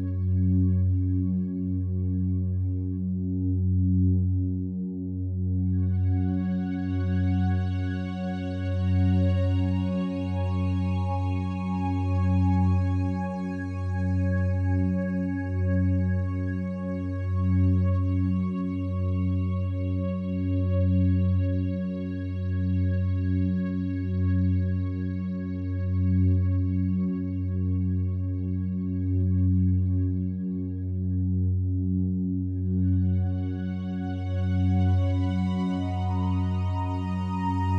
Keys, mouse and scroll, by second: 3.8 a, 4.1 a, 5.2-12.0 alt+drag, 14.0 right click, 16.4 e, 20.6 click, 24.6 right click, 29.2-30.7 drag, 30.7 ctrl+z, 31.8 e.